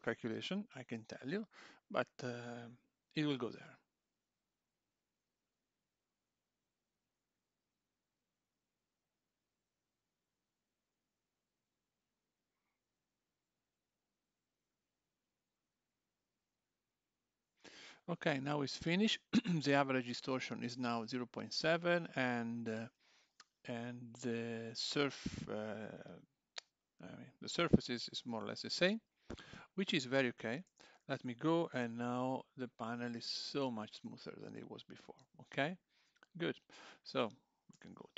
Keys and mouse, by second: 28.9 click, 30.7 Tab, 30.9 click, 31.8 g, 35.7 click, 35.9 Tab, 37.0 click, 37.7 l.